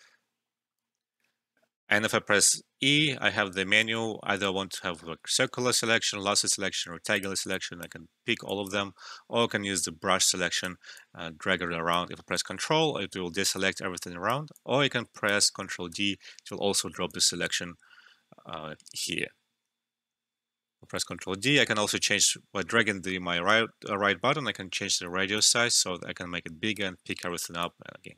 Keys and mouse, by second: 1.0 alt+`, 2.8 e, 7.1 click, 9.8 e, 10.5-12.3 drag, 12.3-15.9 ctrl+drag, 15.9 ctrl+d, 17.0-20.1 drag, 20.1 alt+`, 20.9 ctrl+d, 21.4-25.4 right drag, 25.4-27.1 drag, 27.1 right click, 27.6-28.1 ctrl+drag.